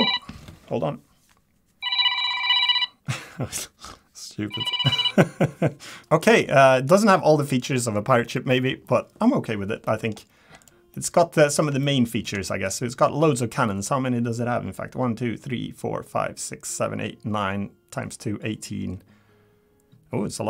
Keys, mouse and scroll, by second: 6.0 scroll down 4, 6.3 Tab, 6.6 middle click, 7.0-7.7 scroll down 2, 8.3 middle click, 9.8 middle click, 10.1 scroll down 1, 10.6 click, 10.8 scroll down 1, 10.9 middle click, 11.3 scroll up 3, 11.8 shift+middle click, 12.0 shift+middle click, 12.5 middle click, 13.4 middle click, 13.6 shift+middle click, 13.8 scroll up 3, 19.1 scroll down 1.